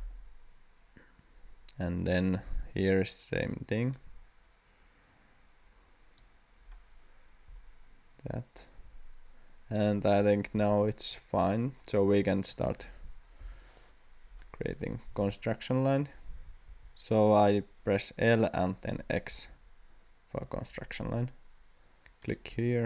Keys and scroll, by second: 12.1 Escape, 13.4 l, 15.2 x, 16.3 x, 16.7 x, 19.3 x, 20.4 x.